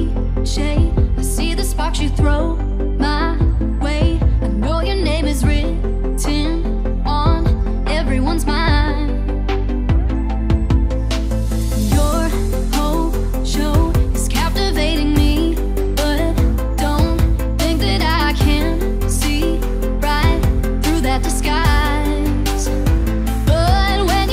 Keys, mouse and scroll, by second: 0.5 shift+click, 1.4 ctrl+g, 1.8-3.6 drag, 4.0-4.4 scroll down 1, 4.5 click, 5.2 Up, 6.1 click, 6.4 Down, 7.1 click, 7.6 click, 8.0 click, 8.3-9.0 scroll up 2, 9.3 right click, 9.5 click, 11.0 click, 11.8 click, 12.3 alt+scroll up 1, 12.8 click, 13.8 alt+shift+click, 15.4 v, 15.5 click, 16.4 right click, 16.8 click, 17.1-18.9 typing, 17.2 click, 19.1 click, 20.1 click, 21.0-21.9 alt+scroll down 2, 22.3 Left, 22.8 ctrl+scroll up 1, 23.1 click.